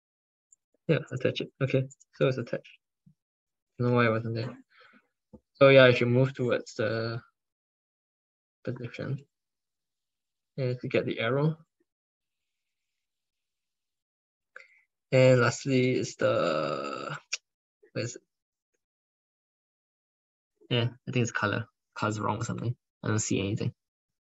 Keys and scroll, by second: 3.6 ctrl+s, 8.6 ctrl+s.